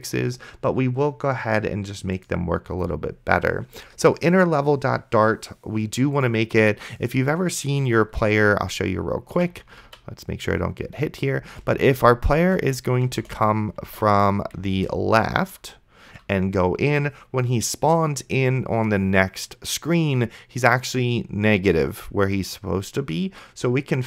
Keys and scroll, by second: 8.2 d, 9.5 a, 9.9 d, 11.7 space, 14.4 d, 14.9 space, 15.8 a.